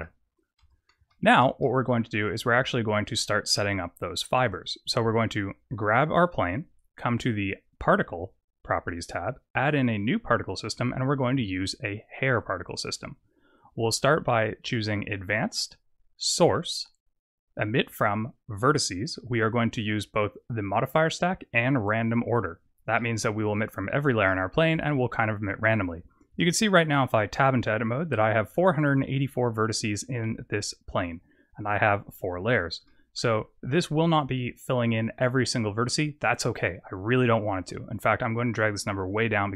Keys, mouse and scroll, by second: 0.5 Tab, 1.0 shift+middle click, 1.5 middle click, 2.1-2.7 scroll down 3, 2.8 click, 4.4 click, 8.4 click, 9.6 click, 12.3 click, 15.1 click, 16.1 click, 17.6 click, 20.6 click, 22.9 middle click, 24.2 middle click, 26.2 Tab, 26.8 middle click, 32.2 Tab, 32.7 middle click, 33.3-34.1 scroll up 4, 34.1-35.3 scroll down 4, 36.4 click.